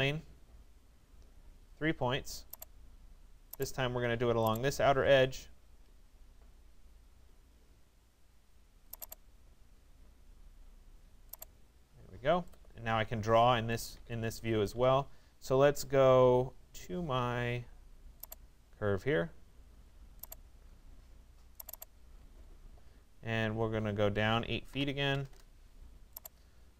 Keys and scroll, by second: 24.3 8, 25.3 Return.